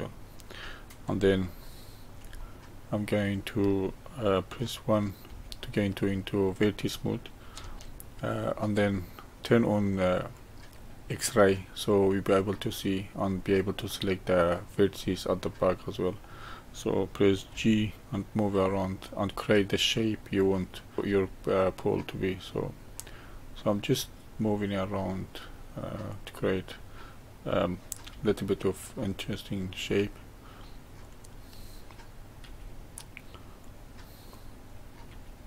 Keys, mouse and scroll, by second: 5.2 1, 6.0-10.3 middle drag, 10.3-12.3 drag, 12.7 drag, 15.0-17.5 middle drag, 17.5 g, 20.3 drag, 21.0 g, 23.6-26.1 middle drag, 26.1 click, 28.1 g, 31.0 click, 32.4 g, 34.3 drag, 35.1 g.